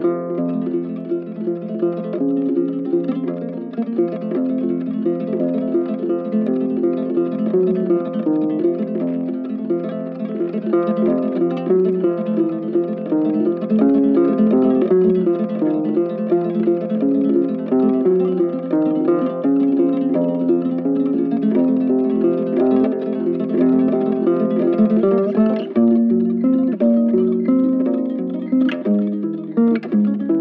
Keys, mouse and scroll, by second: 2.9 right click, 12.0 double click, 13.8 double click, 24.1 ctrl+z.